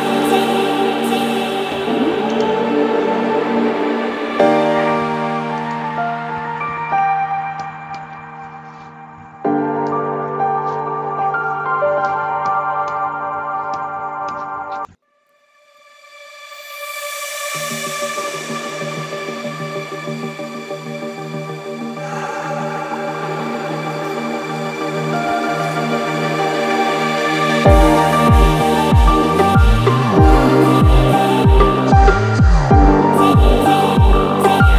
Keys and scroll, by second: 6.3 Escape, 29.0 Escape, 33.4 2, 33.5 ., 33.8 5.